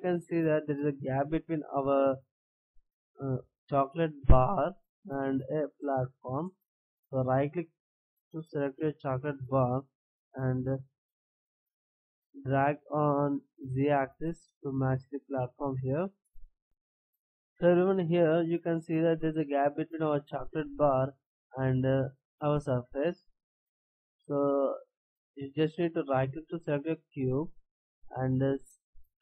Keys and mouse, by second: 8.9-11.0 right drag, 12.6-14.2 drag, 16.6-21.0 right drag, 26.1-29.1 right drag, 29.1-29.2 drag.